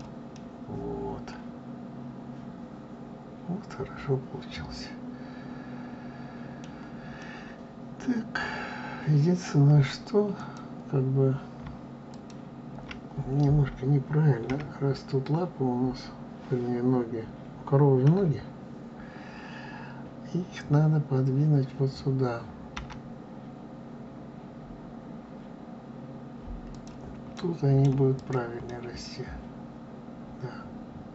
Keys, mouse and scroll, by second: 0.3-3.4 middle drag, 7.1-10.2 middle drag, 10.3 click, 12.0 shift+click, 14.4 KP_1, 17.9 KP_3, 22.7 g, 27.9 right click, 28.1 click, 28.6-31.1 middle drag.